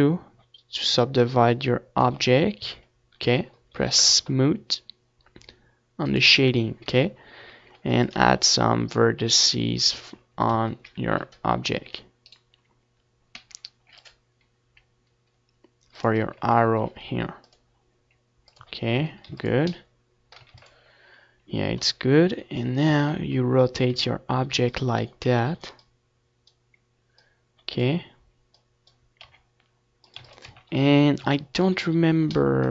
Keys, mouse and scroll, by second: 1.0-5.0 drag, 1.7 a, 2.8 ctrl+r, 5.1-7.0 drag, 5.2 z, 5.7 a, 6.1 ctrl+r, 7.6-9.3 right drag, 9.1 ctrl+r, 11.4-15.5 drag, 11.5 a, 12.0 ctrl+r, 13.7 z, 14.4 Tab, 14.6 ctrl+s, 16.0 ctrl+s, 17.3 KP_1, 18.4 z, 19.5 r, 20.2-27.6 drag, 24.8 r, 25.7 ctrl+s, 26.1 z, 26.8 KP_3, 27.6 middle click, 28.4 ctrl+s, 29.5 ctrl+s, 31.0-32.7 middle drag.